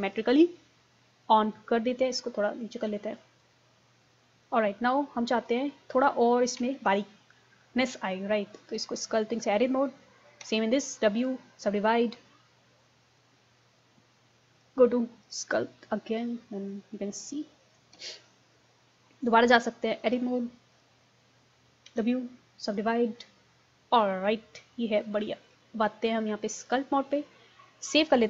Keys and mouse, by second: 1.0 middle click, 1.8 click, 2.0-3.2 middle drag, 3.2 click, 4.9 click, 5.5-7.1 drag, 6.8 ctrl+z, 10.5 w, 15.4-16.4 drag, 18.0 ctrl+z, 21.9 w.